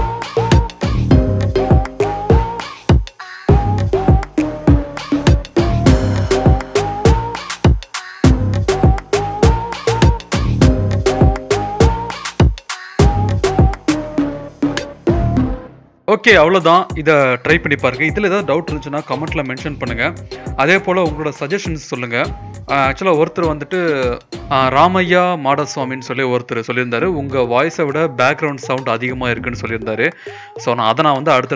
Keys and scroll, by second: 2.5 e, 4.1 z, 5.3-6.2 typing, 6.7 Tab, 9.7-13.0 v, 10.7 0, 12.0 s, 13.4 Tab, 13.8 Tab, 14.4 0, 14.8 s.